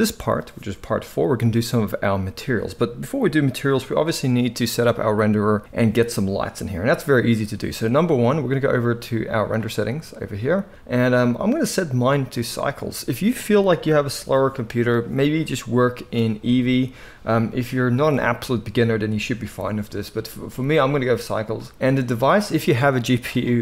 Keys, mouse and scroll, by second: 10.3-11.6 middle drag, 11.6-23.6 drag.